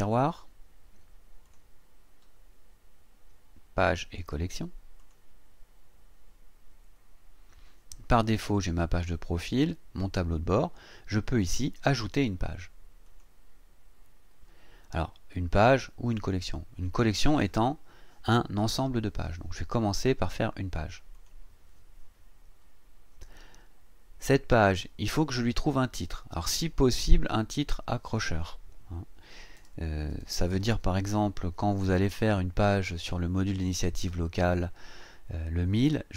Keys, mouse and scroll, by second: 1.4 click, 5.0 click, 13.1 click, 21.1 click, 26.6 click, 27.4 click, 29.6-31.2 typing.